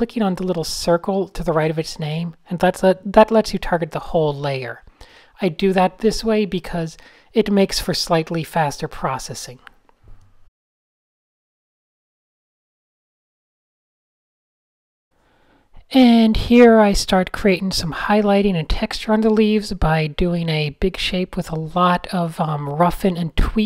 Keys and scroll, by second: 0.5 Tab, 1.0 Tab, 1.4 shift+x, 2.0 n, 5.6 x, 6.1 shift+x, 8.9-10.6 typing, 11.9-14.4 typing, 17.2 a, 17.7 alt+super+r, 18.2 alt+super+t, 19.0 alt+shift+super+t, 21.0 super+z, 21.1 super+z, 22.1 alt+shift+super+t.